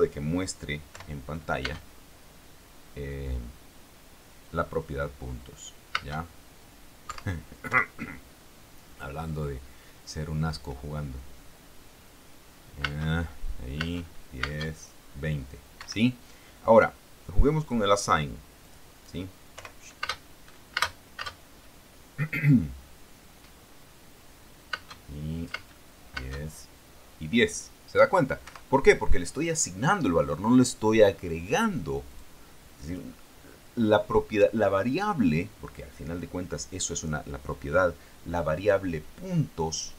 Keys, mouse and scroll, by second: 1.1 p, 1.9 space, 6.2 space, 7.2 Escape, 13.1 space, 15.2 space, 15.9 Escape, 17.8 click, 18.8 click, 19.7 p, 20.3 space, 21.8 space, 25.5 space, 26.9 space, 28.6 Escape, 32.2 click, 33.0 click.